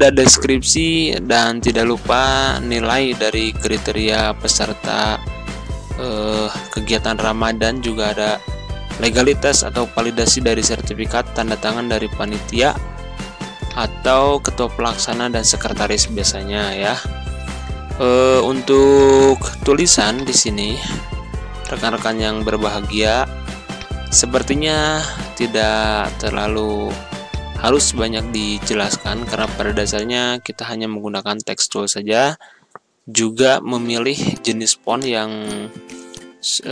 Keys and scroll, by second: 5.0 ctrl+a, 11.0 1, 11.3 3, 11.8 Return, 26.0 c.